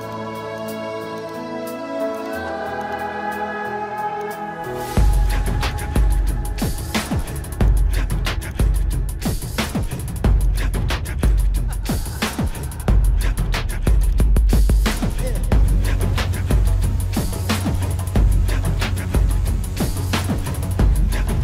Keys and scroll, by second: 1.9 ctrl+alt+z.